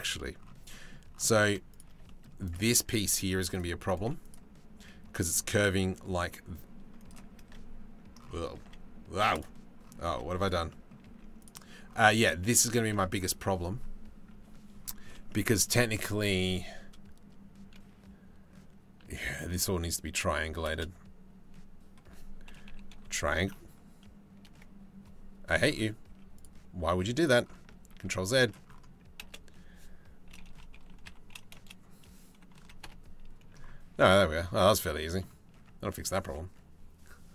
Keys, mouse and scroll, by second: 1.0 z, 2.8 2, 3.1 click, 3.1 3, 3.9-5.8 drag, 3.9 z, 8.4 z, 9.7 z, 10.7 z, 12.4 z, 21.0 space, 25.7 z, 26.5 z, 27.6 ctrl+z, 28.9 space, 33.6 Tab, 35.2 Tab.